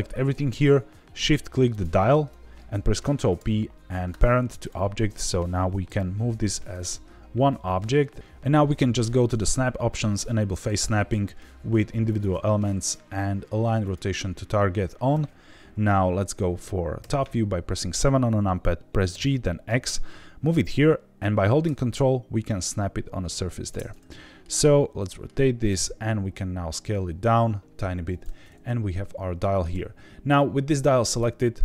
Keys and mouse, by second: 3.1 ctrl+p, 5.8 g, 6.4 Escape, 9.3-14.7 drag, 16.9 KP_7, 19.1 g, 19.6 x, 23.6 ctrl+click, 23.9 middle click, 24.6-25.2 shift+middle drag, 25.7 s, 28.1 drag, 28.4-29.6 middle drag.